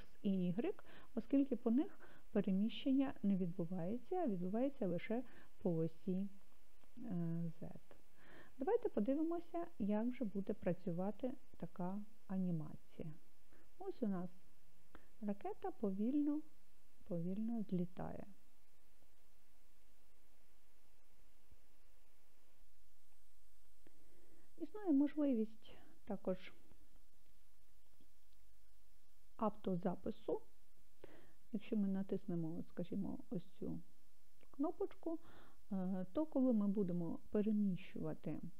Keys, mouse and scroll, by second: 11.7 click, 20.3 click, 33.6-35.9 drag.